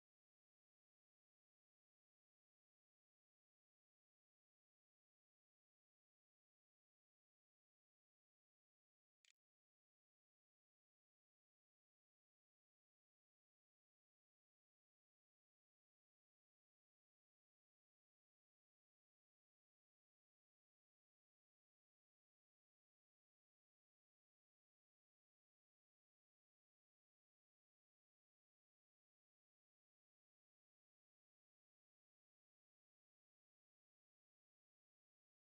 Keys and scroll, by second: 8.2-10.0 typing.